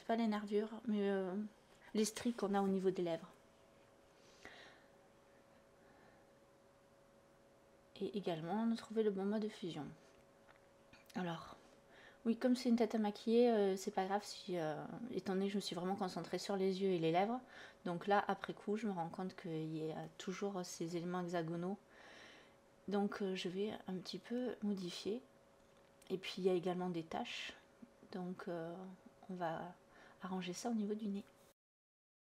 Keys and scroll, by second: 2.9 ctrl+alt+z, 9.2 space, 10.5 ctrl+shift+i, 15.2 ctrl+d, 15.8 ctrl+z, 16.5 ctrl+d, 17.6 space, 20.8 ctrl+shift+i, 21.4 ctrl+z, 22.1 ctrl+alt+z, 22.5 b, 23.7 ctrl+d, 25.6 /.